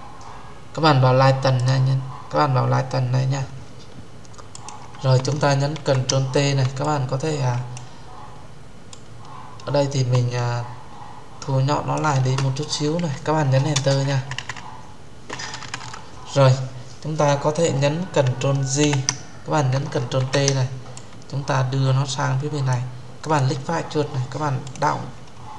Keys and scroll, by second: 5.6 ctrl+t, 13.6 Return, 18.7 ctrl+j, 20.0 ctrl+t.